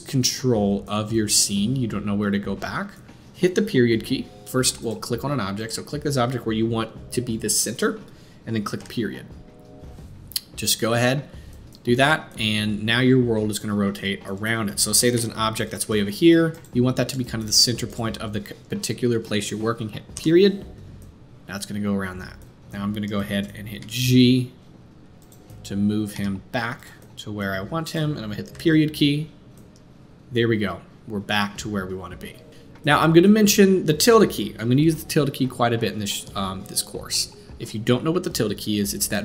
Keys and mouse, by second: 5.6 click, 7.5-16.6 middle drag, 8.8 KP_Decimal, 15.1 g, 16.6-17.9 drag, 17.9-21.7 middle drag, 20.1 KP_Decimal, 21.7-22.7 drag, 23.1-23.4 shift+middle drag, 23.8 g, 26.1 g, 27.5 g, 28.5 click, 28.5 KP_Decimal, 29.2-39.2 middle drag.